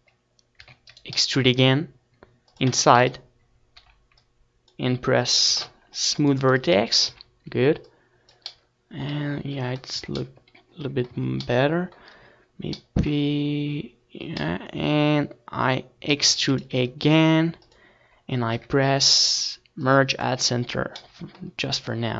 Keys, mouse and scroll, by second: 4.0 e, 4.5-6.3 right drag, 4.8 s, 6.4-8.0 drag, 6.8 KP_1, 7.7 z, 8.1-9.8 drag, 9.4 t, 10.3-11.9 drag, 11.3 t, 11.6 z, 11.9-14.3 middle drag, 15.2 s, 16.4-18.2 right drag, 17.0-18.2 middle drag, 18.0-19.8 drag, 19.3 e, 19.8-21.3 right drag, 20.3 s, 21.3 click, 21.6-22.1 drag, 21.7 KP_1.